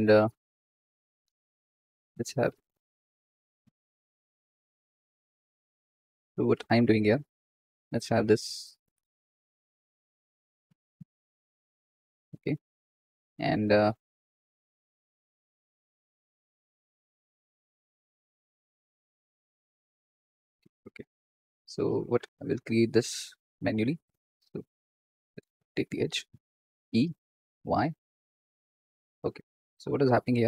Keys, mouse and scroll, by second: 2.3 2, 2.6 click, 3.5 alt+shift+click, 4.1 alt+shift+click, 4.5 alt+shift+click, 4.9 alt+shift+click, 5.3 alt+shift+click, 5.7 alt+shift+click, 6.0 alt+shift+click, 6.9 ctrl+r, 9.2 Escape, 9.5 1, 9.9 click, 10.6 g, 14.9 click, 16.5 s, 18.3 g, 22.6 click, 24.3 x, 25.2 click, 26.8 e, 29.5 Escape, 30.0 ctrl+z.